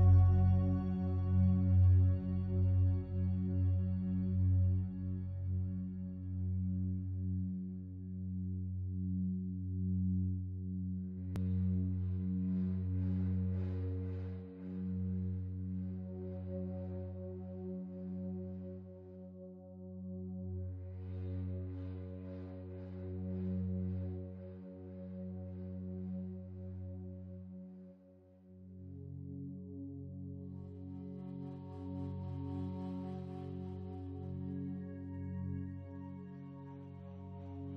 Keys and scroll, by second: 35.7 ctrl+z.